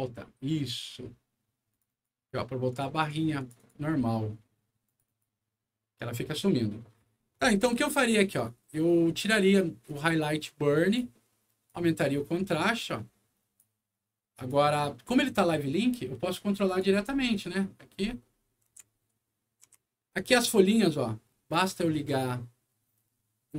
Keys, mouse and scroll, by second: 1.7 click, 1.8 click, 2.7 click, 2.9 click, 3.3 click, 3.5 click, 4.8 click, 5.0 click, 8.2 click, 9.8-10.9 drag, 11.6-13.5 drag, 14.3 click, 16.6 click, 17.0-20.3 right drag, 17.3 w, 17.9-18.4 scroll up 2, 18.6 d, 18.8 scroll down 1, 22.0 click.